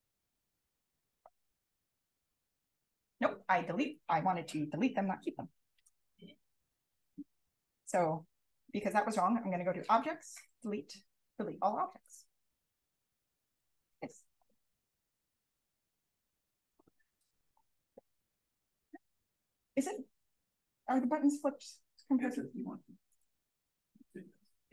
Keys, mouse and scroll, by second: 0.7 click, 2.0 Up, 2.9 click, 3.1-4.3 scroll up 2, 4.3-5.3 scroll up 1, 5.3-9.0 scroll up 1, 9.0-12.5 scroll up 1, 14.2 click, 15.3-15.6 drag, 16.1-19.6 drag.